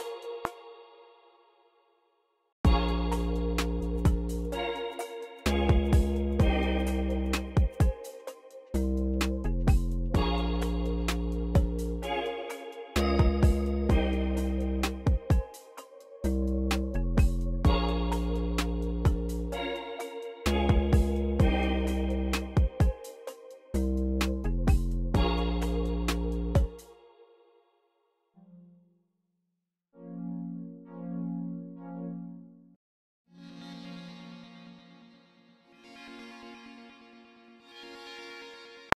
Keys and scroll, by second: 0.0 space, 0.6 q, 1.5 super+r, 2.5 space, 4.1 x, 5.5 x, 8.6 v, 10.7 typing, 13.2 alt+super+s, 16.2 y, 23.1 x, 25.0 x, 26.0 x, 26.3 space, 38.8 r.